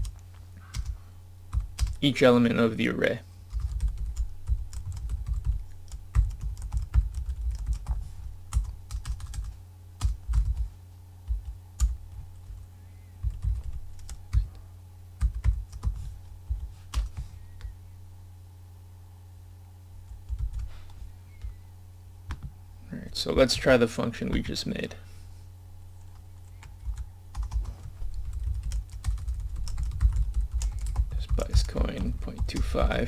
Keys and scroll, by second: 23.8 scroll down 1.